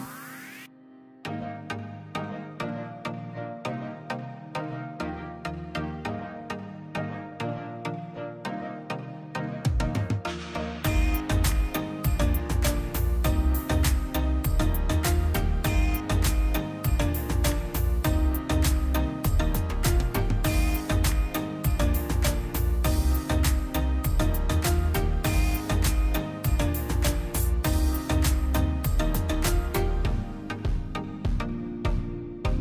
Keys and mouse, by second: 1.3 click, 2.1-2.8 drag, 4.1-4.9 drag, 5.5 click, 7.2-7.9 drag, 8.5-9.3 drag, 9.8-10.5 drag, 10.9-12.2 drag, 12.5-12.9 middle drag, 13.2-13.7 middle drag, 13.9-15.0 middle drag, 15.0 click, 16.8 click, 17.1 middle click, 17.3 click, 17.8 click, 18.3 shift+d, 19.1 middle click, 19.6 click, 20.4-23.2 middle drag, 23.3-24.3 drag, 24.3-25.1 middle drag, 25.1 drag, 27.0 ctrl+shift+click, 27.6 click, 29.7 drag, 30.5 q, 31.6-32.6 middle drag.